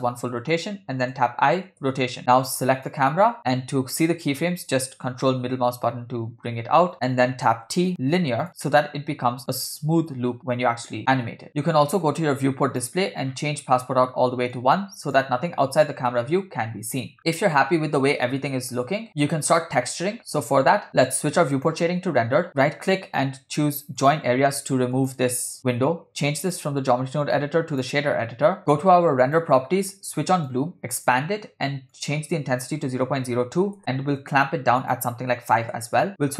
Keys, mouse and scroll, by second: 1.1 i, 2.8 click, 3.4 scroll down 2, 3.4-3.9 scroll down 2, 5.4-7.3 ctrl+middle drag, 7.3 scroll up 6, 7.3-7.6 scroll down 2, 7.7 t, 9.5 click, 9.8 space, 12.7 click, 13.3 scroll down 2, 14.5 click, 16.6-17.1 scroll down 2, 19.1 space, 21.8 click, 22.5-25.1 right drag, 26.4-27.9 drag, 29.2 click, 30.5 click, 31.9-33.8 drag, 33.0 0, 34.8 click.